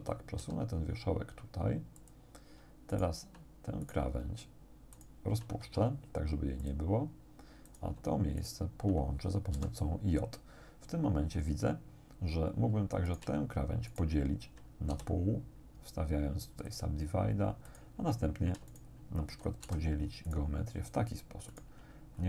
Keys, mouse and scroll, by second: 0.4 g, 2.0 click, 2.9 right click, 3.9 right click, 5.0 shift+right click, 5.7 shift+x, 6.7 click, 7.7 right click, 8.4 shift+right click, 9.6 j, 13.1 shift+right click, 13.9 shift+right click, 14.9 shift+w, 16.7 right click, 17.7 right click, 18.7 shift+right click, 19.7 j, 20.3 right click, 21.5 shift+right click.